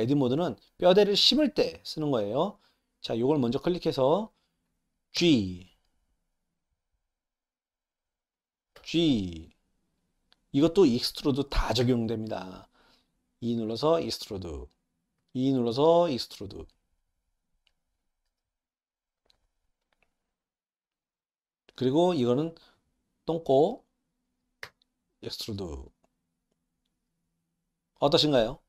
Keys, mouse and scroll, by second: 2.8 click, 8.6 click, 18.0 click.